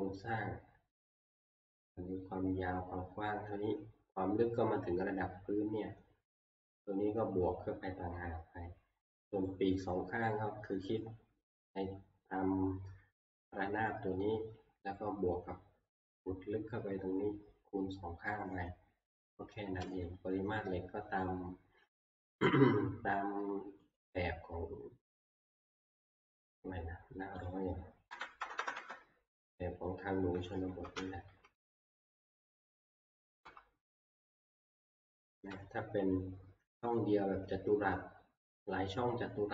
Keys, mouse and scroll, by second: 1.9 shift+middle click, 9.7 middle click, 20.3 scroll up 1, 22.1 scroll, 22.2 click, 24.0 click, 27.5 click, 28.1 typing, 28.8 Return, 30.4 typing, 30.6 Return, 30.6 click, 30.7 Left, 31.0 Left, 31.4 Left, 31.5-32.3 typing, 32.4 Left, 32.8 Left, 32.8 Left, 33.0 Left, 33.0 Return, 33.2 Left, 33.4 Left, 34.1 Right, 34.2 scroll, 34.9 scroll, 35.7 ctrl+scroll, 35.8 Right, 37.2-39.1 scroll.